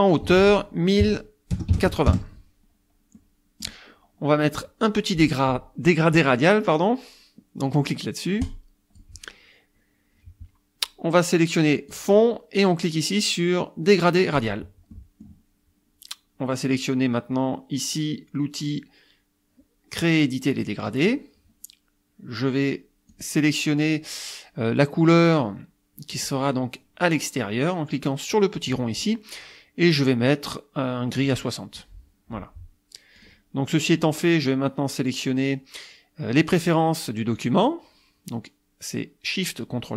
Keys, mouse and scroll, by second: 0.1 ctrl+click, 0.3 ctrl+a, 1.0 KP_1, 1.6 KP_0, 1.7 KP_8, 2.1 KP_Enter, 3.2 click, 8.4 click, 11.9 click, 14.4 click, 15.0 middle click, 20.6 click, 23.1 click, 26.2 click, 31.3 click, 33.2 click.